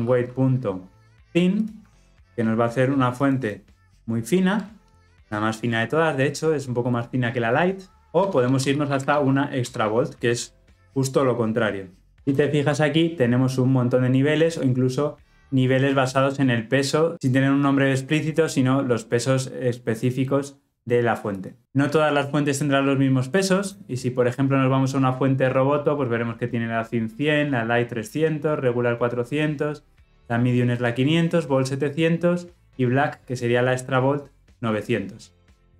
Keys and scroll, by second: 12.6 ctrl+space.